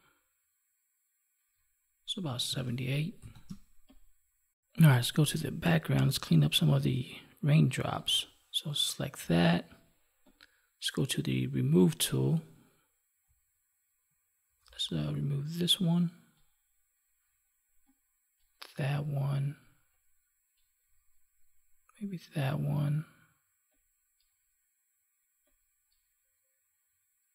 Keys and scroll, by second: 2.4 ctrl+s, 3.4 space.